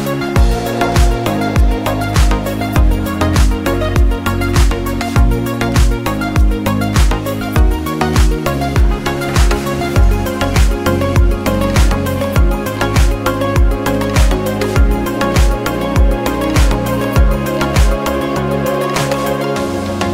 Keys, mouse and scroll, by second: 0.8 click, 2.6 click, 5.5 scroll down 1, 5.7 click, 6.4 right click, 7.4 click, 8.3 right click, 10.6 click, 14.7-15.2 scroll up 1, 16.7 click.